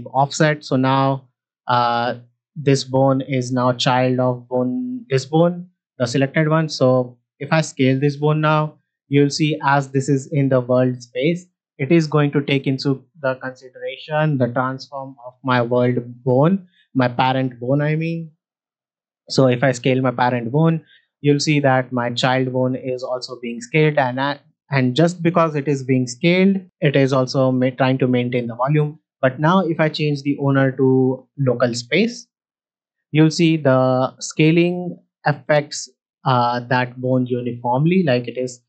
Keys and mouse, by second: 0.3 middle click, 1.8 ctrl+Tab, 3.0 middle drag, 4.1 click, 5.1 shift+middle drag, 5.8 click, 7.6 s, 9.8 click, 16.7 click, 18.9 s, 26.5 click, 29.7-31.3 drag, 32.9 s, 36.3-37.6 right drag, 37.6 s.